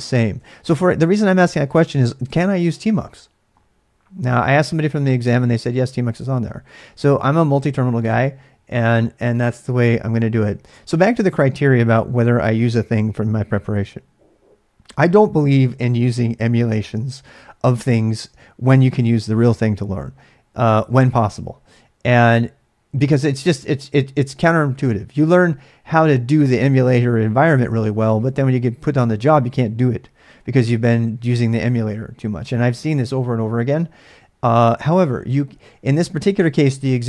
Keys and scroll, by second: 0.0-2.3 typing, 6.7 typing, 8.0 space.